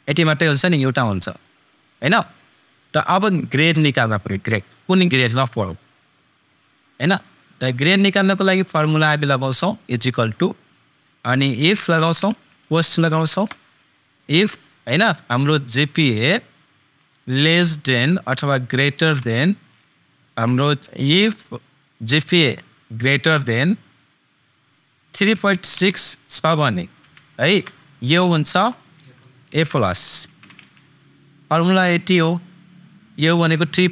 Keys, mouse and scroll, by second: 2.9 super+click, 9.3 super+=, 11.9 super+f, 13.4 shift+super+9, 16.2 super+click, 19.2 shift+super+., 29.4 shift+super+s, 29.4 a.